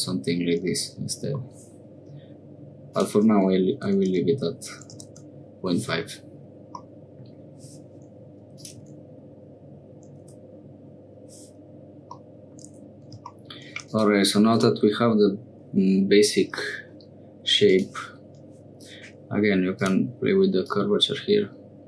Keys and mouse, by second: 2.9-5.6 drag, 6.8 middle click, 8.5-11.2 drag, 12.2 middle click, 13.8 click, 14.5 click, 17.6 click, 19.7 click, 20.6-21.8 drag.